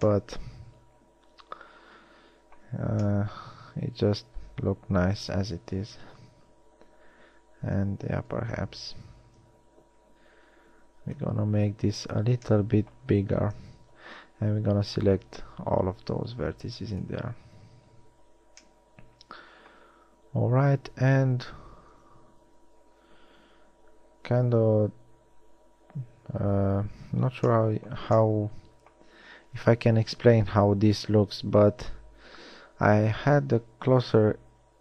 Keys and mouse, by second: 6.4 ctrl+z, 7.5 ctrl+z, 8.7-12.3 typing, 13.8 KP_1, 14.6 e, 18.0 a, 30.0 KP_1, 32.2 ctrl+r.